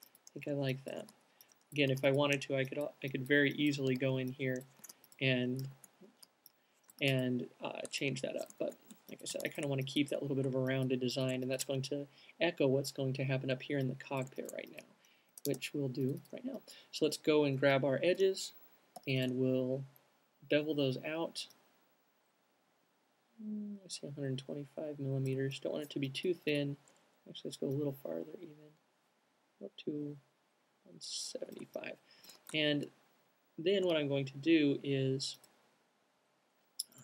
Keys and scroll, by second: 1.4-3.0 typing, 5.1-6.2 typing, 7.4 c, 9.2 q, 16.1 typing, 32.6 alt+q, 33.5 q.